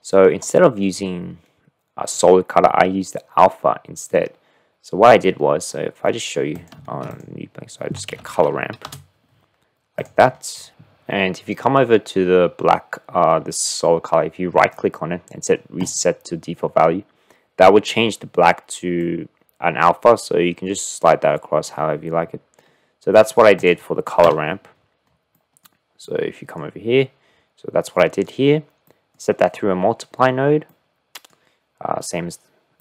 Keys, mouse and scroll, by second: 6.2 click, 6.9 shift+a, 14.6 click, 19.4-21.8 drag, 23.1 middle click, 24.3 Delete, 25.3 click, 26.1 click, 28.1 click, 28.9 click, 30.8 click.